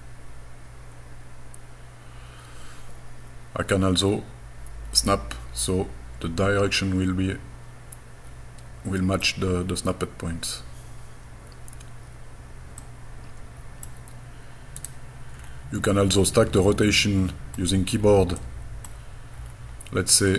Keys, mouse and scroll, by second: 5.0-9.2 middle drag, 12.8-13.9 middle drag, 14.8 right click, 15.3-16.0 scroll down 3, 16.2-16.8 scroll up 4, 16.8 middle click, 16.8 scroll up 1, 17.9-18.5 scroll down 3, 18.4 middle click, 19.3-20.2 scroll up 5.